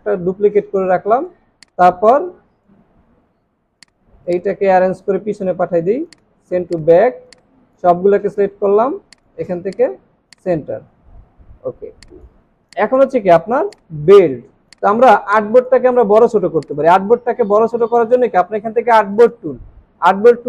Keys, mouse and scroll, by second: 4.2 right click, 11.1 alt+scroll up 1, 11.7-12.6 alt+scroll down 3, 12.6 space, 13.7 space, 14.3 alt+scroll up 1.